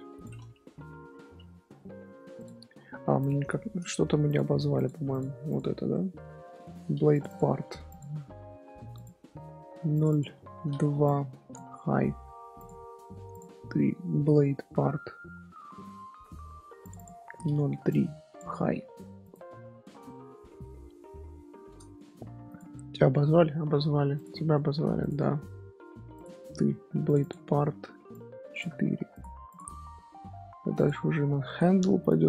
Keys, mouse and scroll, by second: 1.2 alt+h, 1.6 scroll up 1, 1.8-2.3 middle drag, 2.3 click, 2.7-3.1 scroll down 1, 3.2 click, 3.5 shift+middle click, 3.9-4.2 scroll down 1, 4.2 click, 4.7 click, 5.1 click, 5.4 click, 5.9-7.1 shift+middle drag, 7.1 click, 7.2-8.0 drag, 8.9 click, 9.9 click, 10.1-12.6 drag, 13.3 click, 13.6 shift+middle drag, 13.8 scroll down 1, 13.9-14.5 scroll up 2, 16.1 scroll up 1, 16.8 click, 16.9-19.3 drag, 19.7-20.1 scroll up 2, 21.3-22.4 shift+middle drag, 22.4 click, 23.2 shift+middle click, 24.1 click, 24.5-25.0 shift+middle drag, 25.0 click, 26.1 click, 27.0 click, 27.2-29.2 drag, 29.4 click, 29.9-30.7 middle drag, 30.7 click, 31.1 shift+middle click, 32.0 click.